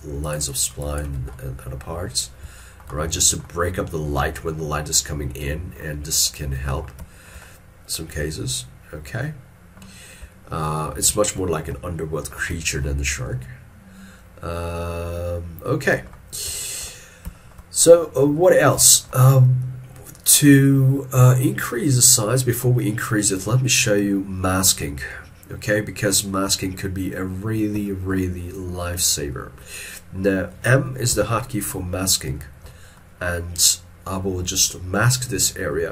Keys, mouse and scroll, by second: 0.3 shift+click, 1.4 middle click, 1.9 scroll down 1, 2.6 shift+middle click, 3.0 shift+middle click, 4.4 shift+middle click, 7.6 shift+middle click, 10.4 ctrl+middle click, 11.2 shift+middle click, 11.9 ctrl+middle click, 12.7 shift+middle click, 16.7 shift+middle click, 17.4 shift+middle click, 18.8 middle click, 21.4 shift+middle click, 26.7 ctrl+middle click, 27.9 shift+middle click, 31.2 m.